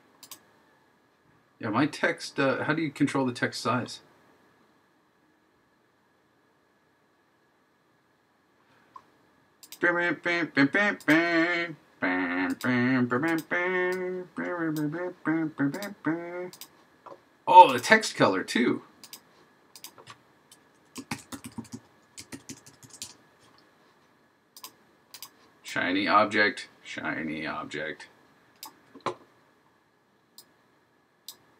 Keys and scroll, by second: 21.2 shift+h, 22.4 shift+1.